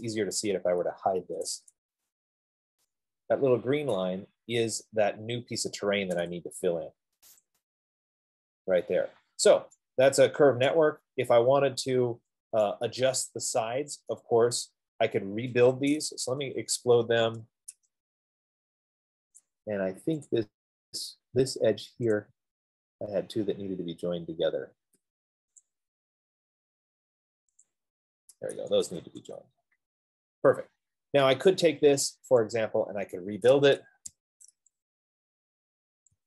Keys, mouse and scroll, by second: 0.1 middle click, 0.7 click, 1.8 typing, 2.3 Return, 4.1 right click, 4.5 middle click, 4.7 middle click, 5.3 middle click, 5.5 middle click, 7.8 click, 11.1 right click, 11.7 scroll, 11.8 scroll up 2, 12.0 middle click, 14.5 right click, 15.6 middle click, 16.9-18.1 typing, 19.8 click, 21.0 click, 22.2 middle click, 22.6 click, 23.3 middle click, 23.8 middle click, 23.9 middle click, 24.1-26.5 middle click, 24.4 middle click, 24.5 middle click, 25.8 scroll, 26.0 shift+click, 28.0 shift+click, 34.4-36.2 typing, 34.7 middle click, 34.7 click.